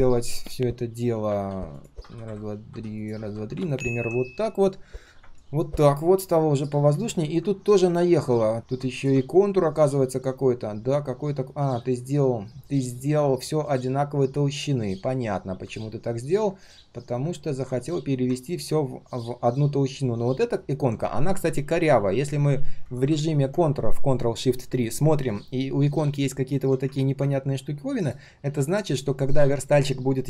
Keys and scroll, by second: 10.8 ctrl+shift+3, 11.7 ctrl+shift+3, 13.0 ctrl+shift+3, 17.8 ctrl+shift+3, 21.2 ctrl+shift+3, 29.6 ctrl+shift+3.